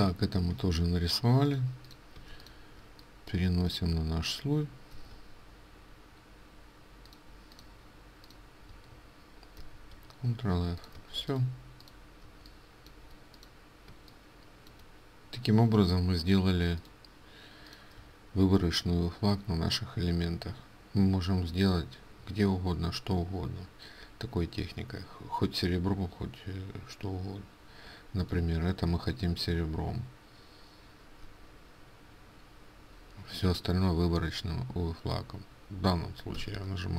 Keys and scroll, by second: 2.3 ctrl+space, 5.0 ctrl+x, 9.5 ctrl+f, 11.1 ctrl+space, 36.4 ctrl+x.